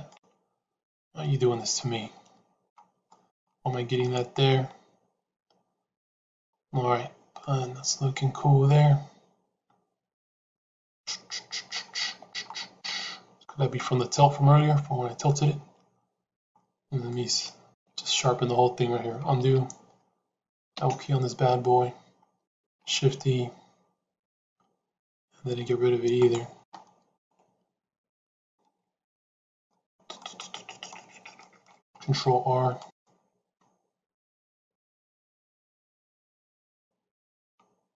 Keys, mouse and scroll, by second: 0.0-2.6 middle drag, 4.0 middle click, 6.8 Tab, 7.2-11.6 middle drag, 12.0 Tab, 12.8 middle click, 15.2-16.3 middle drag, 17.0 middle click, 17.6 a, 19.3 ctrl+z, 20.6 l, 22.6 shift+e, 27.1-29.2 middle drag, 29.4 middle click, 30.1 middle click, 31.3 middle click, 31.8 ctrl+r.